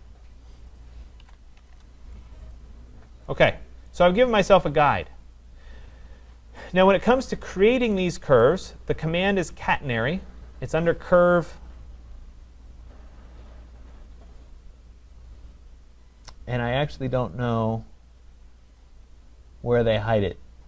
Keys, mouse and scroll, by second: 0.7 click, 1.2-1.7 typing, 1.9 Return, 2.6 click, 3.0-3.3 scroll, 3.9 right click, 5.7 middle click, 6.8 click, 7.0 click, 7.6 middle click, 8.4 right click, 9.0 middle click, 10.9 click.